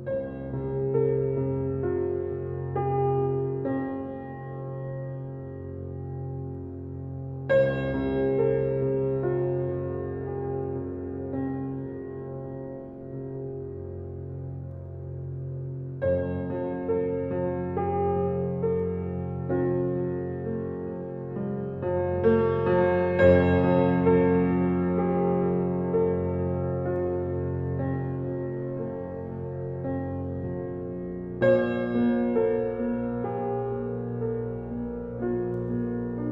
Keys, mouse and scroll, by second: 0.0 Tab, 0.9-1.5 scroll down 5, 2.4-3.2 middle drag, 3.2-3.6 scroll down 5, 4.9 click, 11.9 scroll up 1, 13.8 click, 15.1 click, 23.3-26.3 drag.